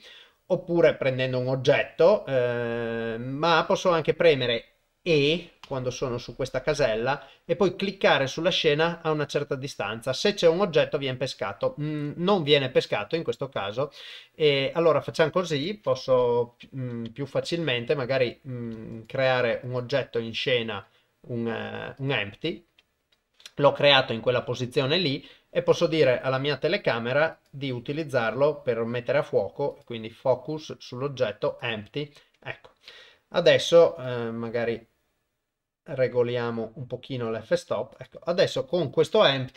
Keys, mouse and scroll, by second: 5.6 e, 14.1 middle click, 16.5 KP_7, 17.5 shift+middle click, 18.9 right click, 19.7 shift+click, 20.0 shift+a, 23.4 middle click, 24.3 KP_0, 27.4 click, 29.7 click, 34.1-37.3 shift+drag, 38.0 click, 38.5 click.